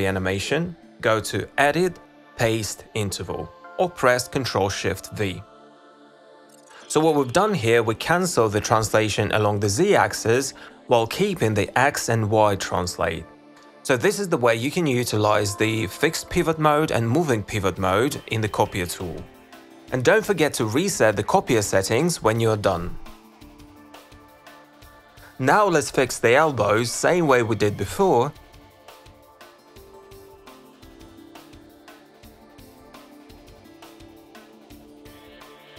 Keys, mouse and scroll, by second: 24.8 click, 25.1 click, 25.3 click, 25.6 click, 26.3 click, 26.5 click, 27.0 click, 27.2 click, 27.4 click, 28.1 click, 28.3 click, 29.1 z, 29.8 click, 30.9 click, 31.2-32.3 alt+drag, 32.6 z, 33.1 alt+click, 33.3 click, 34.6 click, 34.8 click.